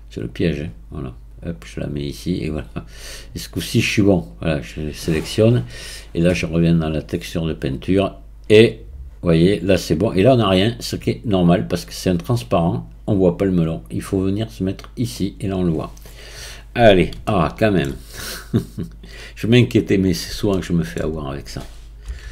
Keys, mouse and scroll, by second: 4.3-5.1 drag, 7.2 click, 14.8 click, 15.5-16.0 scroll up 1, 16.0-17.1 scroll up 1, 19.2 shift+middle click, 19.3 click, 20.0-20.6 scroll down 1, 20.6-22.0 shift+middle drag, 22.0 KP_1.